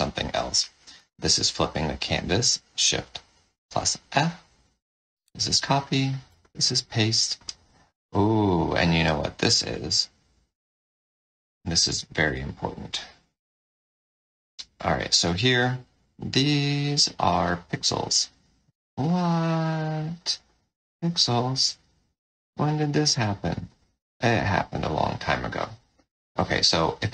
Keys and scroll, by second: 0.9 shift+f, 5.1 ctrl+c, 6.9 ctrl+v, 9.9 ctrl+z.